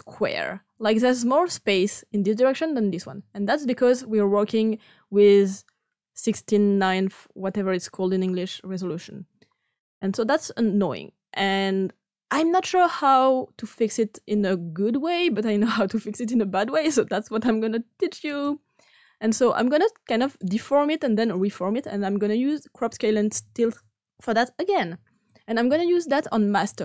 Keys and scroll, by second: 22.8-24.0 typing.